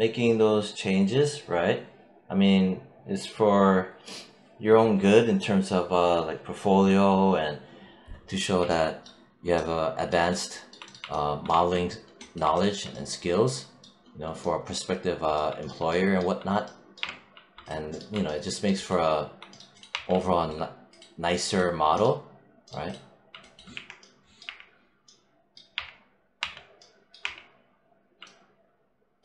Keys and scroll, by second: 11.3 1, 19.7 1, 23.6 4, 25.6 3.